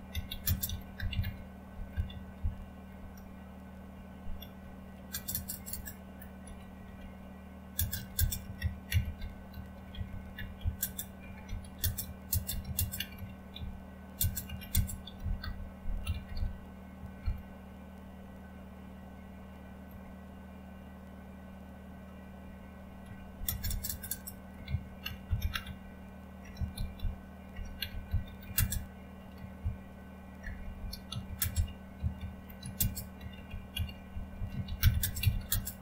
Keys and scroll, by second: 0.0-3.0 typing, 4.3-17.4 typing, 19.7-20.4 typing, 22.8-35.8 typing.